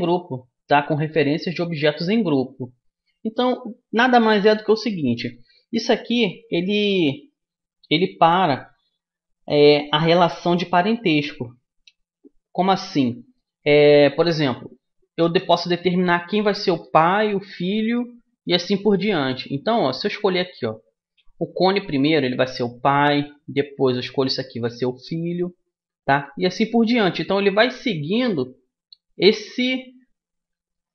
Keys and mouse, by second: 12.9-14.6 middle drag, 17.1 a, 20.7-22.5 middle drag, 22.5 right click, 23.9-30.9 right drag.